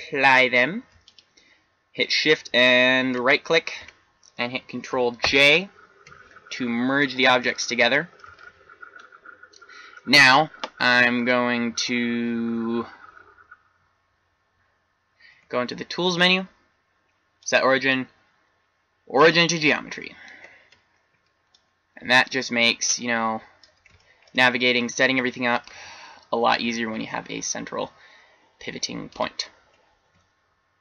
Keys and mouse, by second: 5.5 ctrl+j, 15.2 t, 18.4 click, 21.5-23.2 drag, 23.9-26.8 drag, 26.8 r, 30.3 Tab.